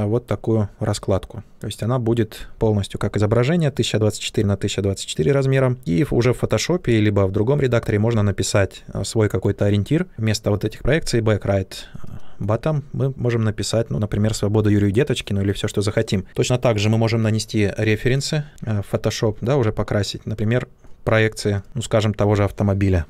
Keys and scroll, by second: 18.9 ctrl+z.